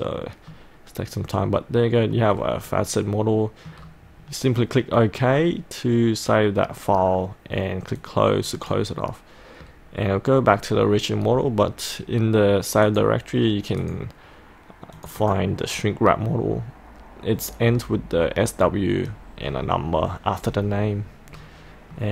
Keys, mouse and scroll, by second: 0.1-0.5 scroll up 1, 0.5 scroll down 1, 0.6-2.4 middle drag, 2.4-2.7 scroll up 1, 2.9 middle click, 3.7 scroll down 1, 4.2-8.0 scroll up 1, 8.0 click, 8.1-8.8 scroll up 1, 12.9-14.9 drag, 20.7-22.0 scroll down 1, 22.0-22.1 middle drag.